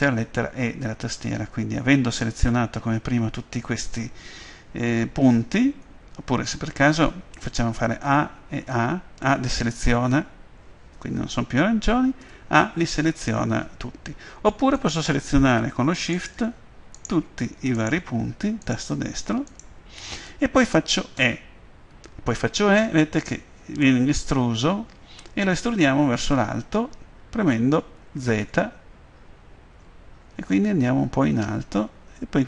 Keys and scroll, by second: 8.1 a, 21.3 e, 28.4 z, 29.5 z.